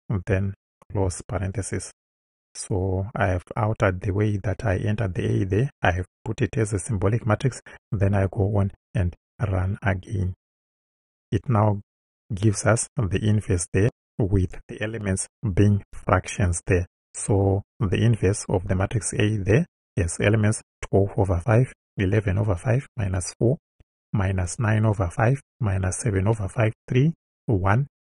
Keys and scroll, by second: 0.3 shift+Right, 0.9 shift+0.